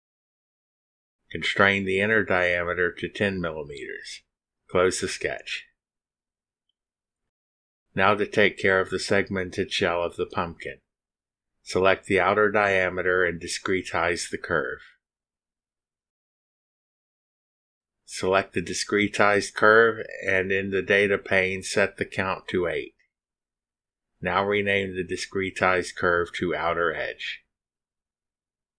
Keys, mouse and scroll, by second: 0.2 Return, 0.9 Return, 3.3 click, 4.7-5.7 typing, 5.8 Return, 7.4 click, 8.4-10.7 drag, 11.8 click, 14.5 click, 16.7 click, 18.5 click, 20.2 click, 21.5 8, 22.8 click, 23.2 click, 24.0 click, 24.9-27.1 typing.